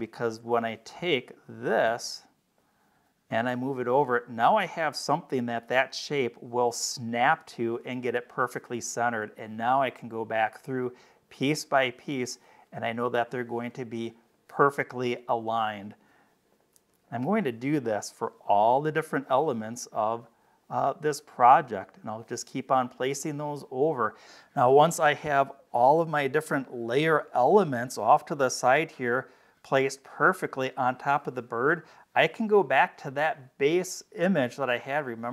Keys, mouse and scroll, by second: 0.2 click, 2.5-7.2 drag, 8.4 click, 9.9 click, 11.0-13.6 drag, 15.4-15.8 scroll down 2, 16.4 click, 16.8 space, 17.0 click, 18.8 click, 19.7-21.9 drag, 23.0-23.5 scroll up 2, 24.7-25.0 scroll down 2, 25.7 click, 26.3 click, 26.3 space, 28.5 space, 28.7 click, 29.9-30.5 scroll up 4, 34.6 click.